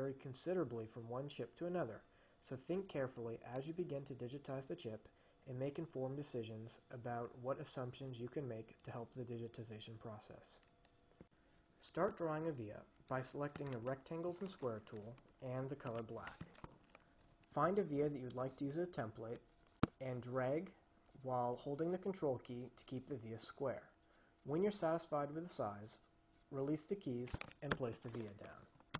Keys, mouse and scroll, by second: 13.9 click, 16.1 click, 19.3-28.0 drag, 27.9 ctrl+Escape.